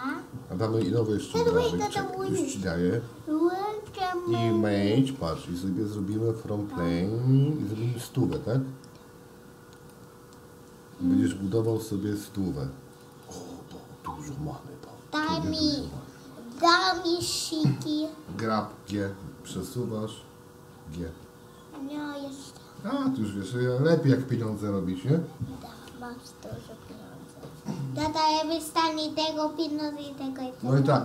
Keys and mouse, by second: 1.0 shift+a, 21.1 shift+d.